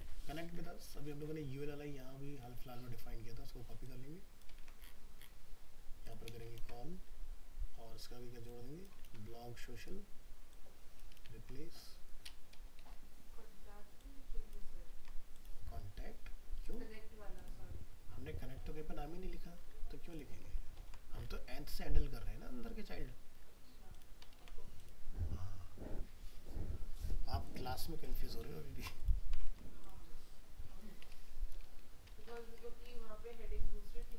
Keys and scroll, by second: 4.6 ctrl+c, 6.6 ctrl+v, 9.0 ctrl+c, 11.2 ctrl+v, 14.9 ctrl+v, 20.8 ctrl+s, 24.4 ctrl+s, 29.5 ctrl+s.